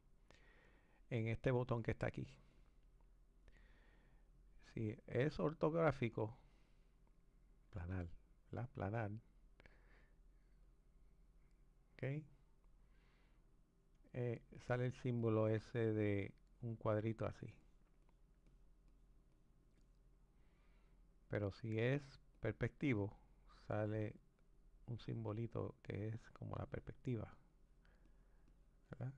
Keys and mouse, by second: 1.6-5.5 drag, 10.6 click, 15.2-22.4 drag, 24.2-25.3 drag, 25.9-29.1 drag.